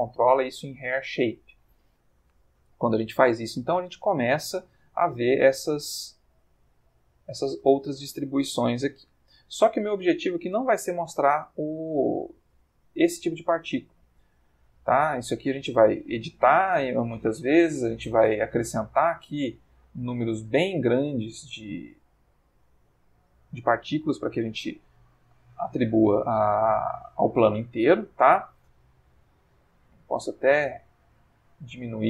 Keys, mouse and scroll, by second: 5.2 ctrl+middle click, 6.8 ctrl+middle click, 8.1-9.2 ctrl+middle drag, 10.0 middle click, 11.7 click, 12.9 middle click, 13.4 middle click, 13.8 middle click, 18.4 middle click, 20.8 middle click, 21.2 middle click, 25.8 click, 28.4 click, 28.8 s.